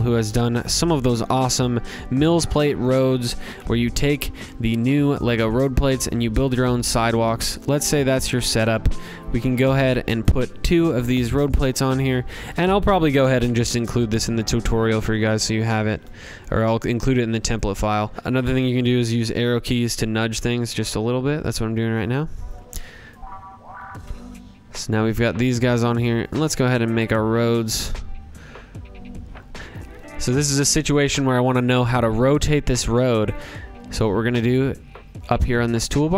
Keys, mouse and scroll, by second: 0.5 middle click, 1.8 click, 2.3 ctrl+c, 2.6 ctrl+v, 4.1 click, 4.4 scroll, 4.9 click, 6.2 shift+click, 9.1 click, 10.6-11.2 scroll down 3, 14.3 click, 15.6 shift+click, 16.5 click, 17.2 middle click, 17.9 click, 18.1 click, 18.1-18.5 scroll down 10, 18.6 scroll up 3, 21.0 click, 21.0 scroll down 1, 22.0 click, 22.9 ctrl+g, 23.3 scroll, 23.8-24.2 scroll down 8, 24.5 scroll up 2, 26.1 click, 26.2 scroll, 30.0 click, 30.5 click, 32.2 click.